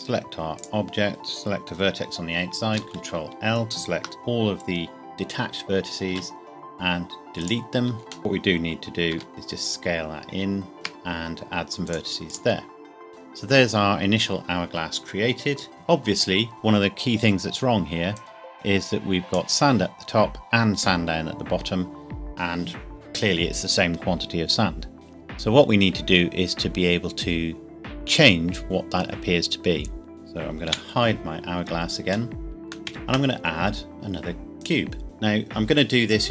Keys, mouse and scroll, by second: 0.5 click, 2.7 ctrl+l, 6.1 x, 7.4 click, 9.1 e, 9.3 s, 10.7 ctrl+r, 10.9-11.9 scroll up 1, 11.9 click, 18.1 click, 30.1 click, 30.7 h, 31.8 scroll up 1, 32.3 shift+middle click, 32.9 shift+a, 34.6 click.